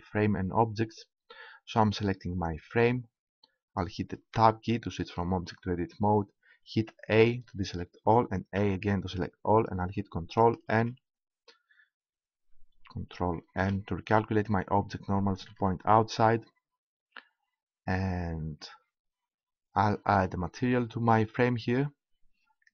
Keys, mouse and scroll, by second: 2.4-3.9 right drag, 3.9 click, 4.4 Tab, 7.2 a, 8.5 a, 10.7 ctrl+n, 13.4 ctrl+n, 15.5 Tab.